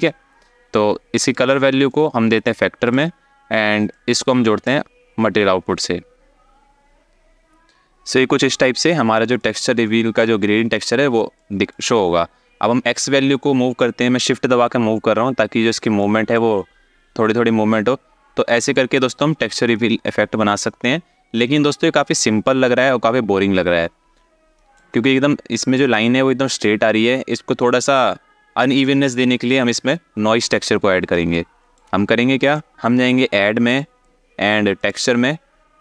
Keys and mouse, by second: 0.9 alt+shift+click, 1.5-2.6 drag, 3.6 click, 3.8 click, 9.1 alt+shift+middle click, 11.1 alt+shift+middle click, 12.7-15.6 shift+drag, 16.1-24.3 shift+drag, 31.1 alt+shift+middle click, 32.2 ctrl+click, 33.5-35.8 drag.